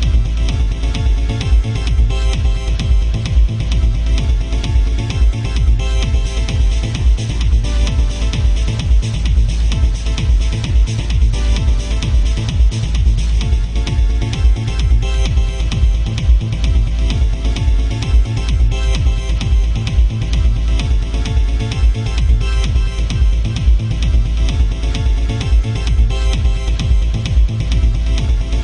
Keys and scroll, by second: 7.7 ctrl+z, 8.5 ctrl+z.